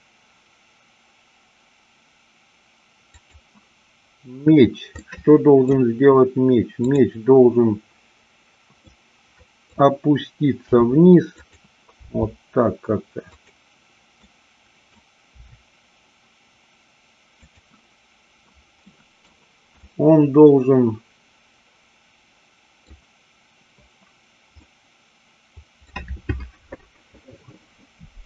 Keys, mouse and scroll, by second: 3.2 click, 5.0 scroll up 1, 5.2 middle click, 6.8-8.0 drag, 8.9 middle click, 10.8 r, 11.4 click, 12.0 g, 13.4 click, 14.3-15.0 middle drag, 15.4 r, 17.5 click, 18.9 middle click, 19.8-22.9 middle drag, 24.6-25.8 middle drag.